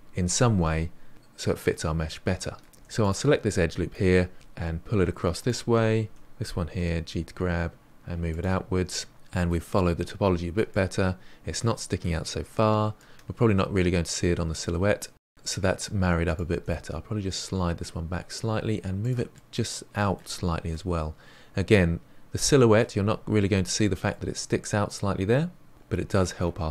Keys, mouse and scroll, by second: 3.6 2, 3.8 click, 4.4 middle drag, 4.5 ctrl+z, 5.0 g, 6.2 1, 6.3 click, 6.9 g, 8.3 scroll down 1, 8.5-14.7 middle drag, 15.0 scroll down 1, 15.2 middle click, 15.4-16.2 scroll up 2, 16.2 click, 16.5 g, 19.3-23.7 middle drag, 24.0-25.7 middle drag, 25.7-26.1 scroll down 3, 26.1-26.7 middle drag.